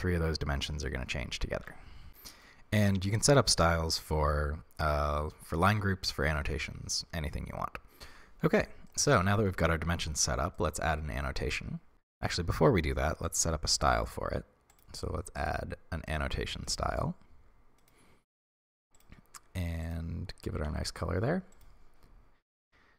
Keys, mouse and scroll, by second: 1.7 ctrl+z, 2.1-16.2 shift+middle drag, 11.9 Tab, 16.2-17.9 drag, 20.6 ctrl+v, 21.6-21.9 drag, 21.9-22.8 scroll down 1.